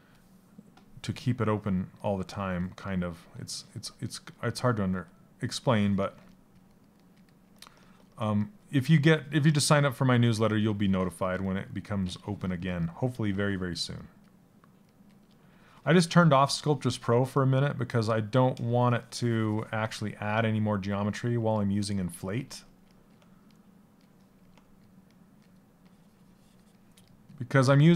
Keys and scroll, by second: 4.5 s.